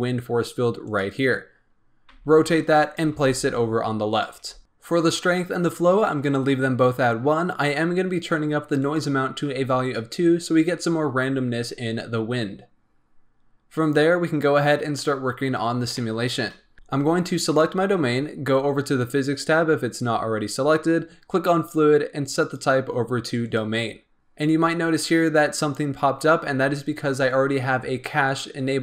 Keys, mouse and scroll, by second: 2.0 r, 2.9 g, 4.3 r, 8.7-9.9 drag, 15.9-16.7 shift+middle drag, 16.7 a, 17.4 click, 21.5 click, 22.3-24.1 drag.